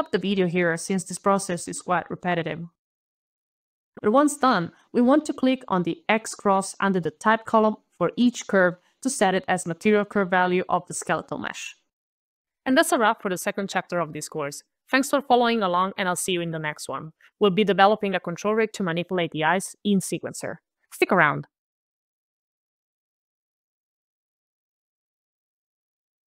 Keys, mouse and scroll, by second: 0.9 alt+Return, 2.0 alt+click, 2.1 alt+click, 2.8 alt+click, 2.9 ctrl+alt+v, 2.9 alt+Left, 3.0 alt+BackSpace, 3.0 alt+shift+y, 3.1 alt+Return, 3.2 alt+scroll, 3.4 alt+shift+l, 3.4 alt+click, 3.6 alt+h, 3.6 alt+t, 3.6 alt+shift+-, 3.6 alt+shift+o, 3.6 alt+f, 3.7 alt+s, 3.7 alt+e, 3.7 alt+t, 3.7 alt+Return, 7.0 alt+click, 7.5 alt+click, 7.9 alt+click, 8.2 alt+click, 8.6 alt+click, 9.0 alt+click, 9.3 alt+click, 9.6 alt+click, 13.3 alt+8.